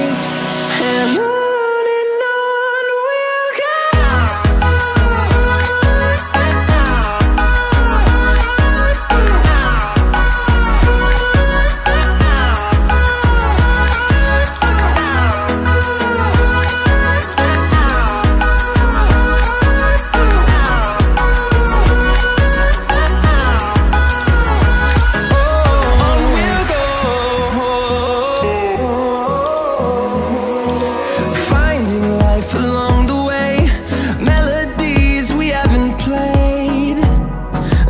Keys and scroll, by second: 15.5 ctrl+t, 20.5 Return.